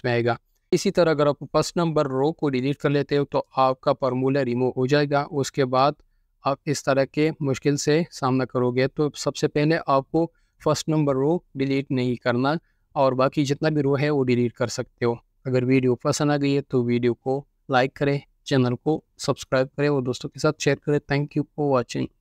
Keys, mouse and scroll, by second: 3.2 ctrl+z, 5.8 right click, 10.5 ctrl+z.